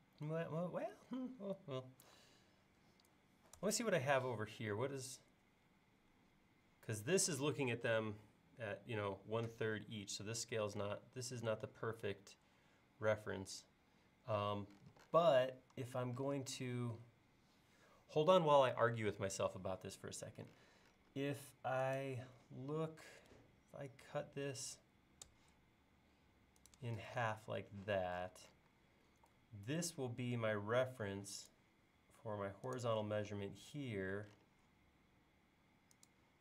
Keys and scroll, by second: 3.6 super+Tab, 15.8 l, 27.3 space, 29.1 l, 33.3 l.